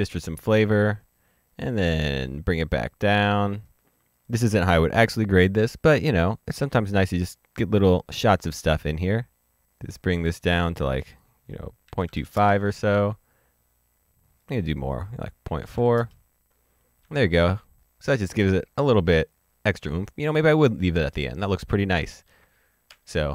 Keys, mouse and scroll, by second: 3.3 click, 8.7 click, 11.5 click, 12.0 KP_2, 12.2 KP_5, 12.4 KP_Enter, 14.3 KP_Enter, 15.6 KP_Decimal, 15.7 KP_4, 16.0 KP_Enter, 17.3 ctrl+d, 18.1 ctrl+d, 19.2-19.8 scroll down 1, 19.9-20.5 scroll down 1, 20.5 middle click, 21.1-21.6 scroll up 1, 22.1 ctrl+d, 22.9 ctrl+d.